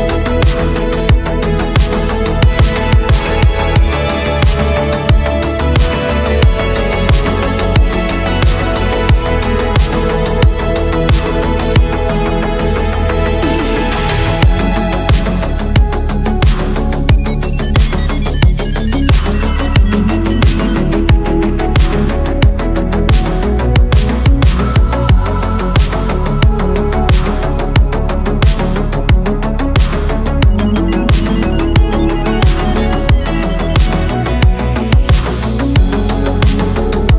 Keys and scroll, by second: 0.1 ctrl+z, 0.9 ctrl+z, 2.3 space, 3.6 space, 6.5 space, 8.4 ctrl+z, 8.7 ctrl+z, 8.9 space, 9.4 ctrl+z, 11.1 ctrl+z, 11.3 ctrl+z, 17.0 space, 17.4 space, 21.9 ctrl+z, 25.3 space, 27.0 space, 30.3 space, 33.9 ctrl+z, 34.1 ctrl+z.